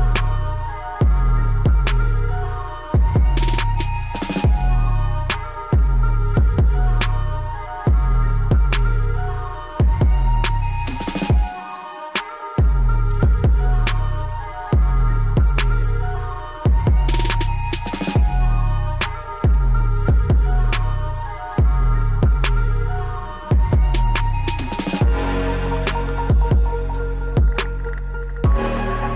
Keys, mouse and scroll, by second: 5.1-8.4 drag, 8.4-18.2 drag, 11.8 typing, 22.1 click, 25.3 click.